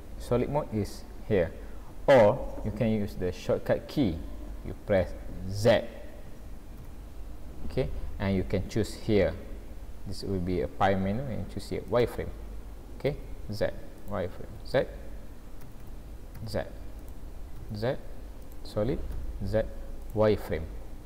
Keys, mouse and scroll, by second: 6.8 z, 13.1 z, 14.6 z, 15.7 z, 17.6 z, 19.1 z.